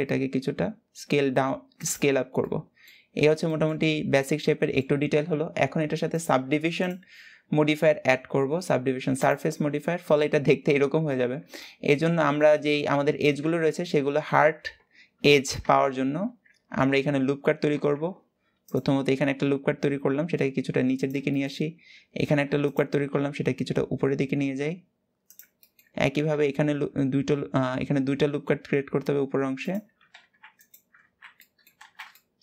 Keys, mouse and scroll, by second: 1.8 Tab, 2.1-2.7 middle drag, 2.7-3.2 scroll down 5, 3.2-5.8 shift+middle drag, 5.8 click, 6.5 click, 9.0-9.4 drag, 9.4 scroll up 1, 9.9-10.8 middle drag, 10.8 Tab, 11.2-13.1 middle drag, 13.1 Tab, 14.1 Tab, 15.8 ctrl+e, 17.5 ctrl+r, 21.0 shift+middle click, 21.3-21.9 scroll up 1, 21.9 ctrl+r, 25.3 shift+middle click, 25.6-26.2 scroll up 1, 26.2 ctrl+r, 30.7 alt+z, 31.0 scroll up 1, 31.1 middle click, 31.5 alt+z, 31.8 shift+middle click.